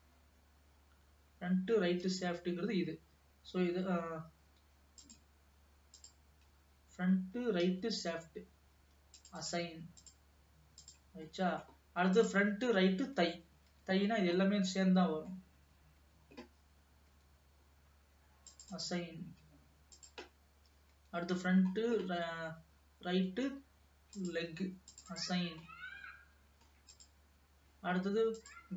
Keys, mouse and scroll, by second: 0.0 alt+a, 0.3-0.9 scroll up 2, 2.1 l, 5.1 click, 6.1 click, 7.8 l, 8.3-8.7 scroll down 1, 9.3-10.4 drag, 11.0 click, 11.7 middle click, 12.6 click, 13.4 l, 13.9 l, 14.4 scroll down 2, 14.6-16.1 middle drag, 16.1 l, 17.2 l, 18.6 click, 19.2-20.2 scroll down 2, 20.2 click, 21.1 l, 21.9 scroll down 2, 23.2 l, 24.3 click, 25.1 click, 25.8-27.1 middle drag, 27.1 click, 28.5 click.